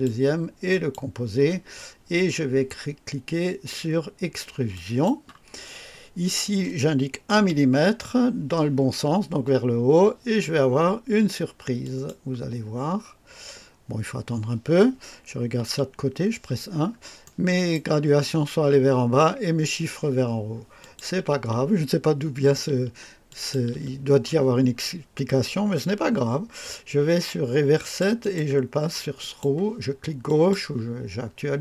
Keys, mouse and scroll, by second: 0.6 ctrl+click, 4.6 click, 7.2 KP_1, 11.7 click, 15.5 KP_1, 16.6 scroll up 1, 17.1 right click, 20.7 click, 23.2 ctrl+click, 27.7 click, 28.4 click, 29.1 click, 30.2 click.